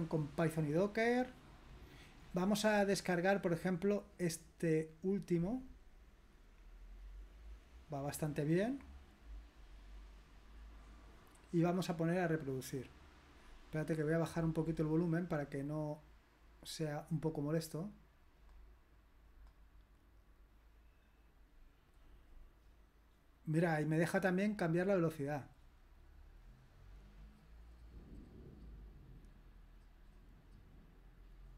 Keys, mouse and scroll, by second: 0.6-1.7 scroll down 5, 1.9-2.7 scroll up 5, 5.7 click, 15.5-17.1 drag, 18.4 click, 19.3 click, 24.7 click, 26.5 click.